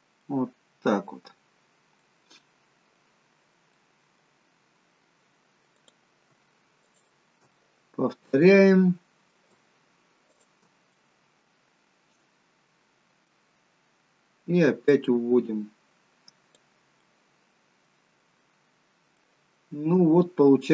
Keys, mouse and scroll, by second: 1.7 middle click, 1.7-2.3 scroll up 2, 2.1 middle click, 3.9 middle click, 5.9 click, 6.9 shift+click, 7.6 middle click, 10.4 shift+click, 11.1 middle click, 13.6-14.1 scroll down 2, 15.0 click, 17.1 middle click, 18.6-19.3 scroll up 1, 19.3 middle click.